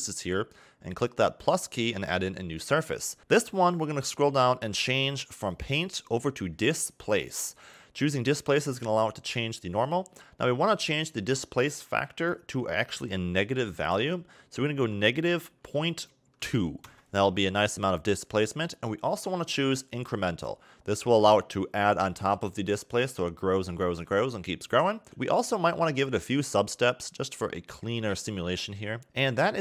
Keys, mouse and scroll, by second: 1.1 click, 3.2 click, 4.5 scroll down 1, 5.5 click, 12.2 click, 21.2 click, 26.0 click, 26.5 click, 29.0 scroll down 4.